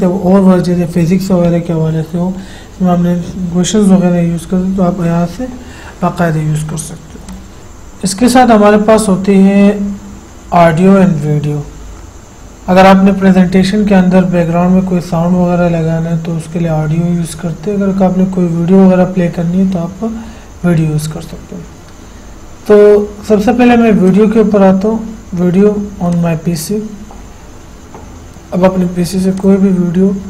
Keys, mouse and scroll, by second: 7.5 click, 7.6 F8, 24.3 click, 26.4 click, 29.6 click.